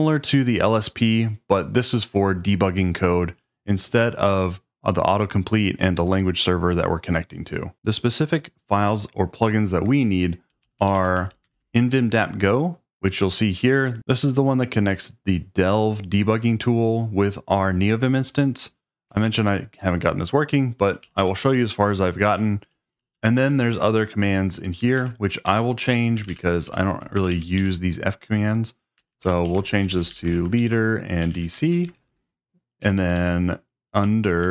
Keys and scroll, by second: 9.9-12.0 typing, 13.5 typing, 19.1 Escape, 21.0-34.4 typing, 29.5 Left.